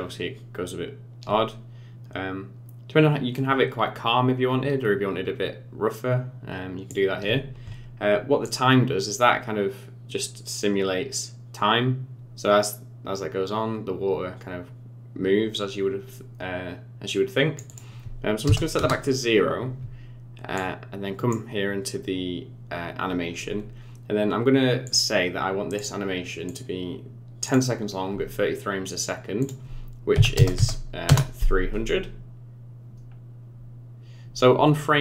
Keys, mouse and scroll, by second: 8.4 click, 17.6 click, 20.5 click, 24.8 click, 25.7 click, 26.4 click, 29.4 click, 30.5 KP_0, 32.0-33.5 scroll down 5, 33.7-34.8 scroll up 1.